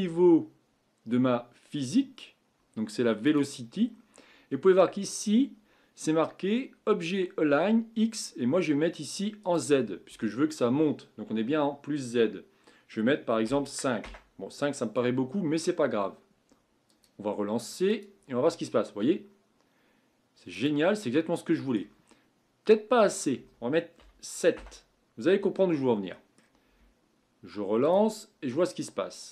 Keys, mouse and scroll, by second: 3.2-3.8 drag, 3.8 scroll down 6, 9.4-12.6 drag, 16.9-21.2 drag, 21.2-23.1 middle drag, 23.1-26.1 drag, 26.1-27.8 middle drag, 27.8-29.3 drag.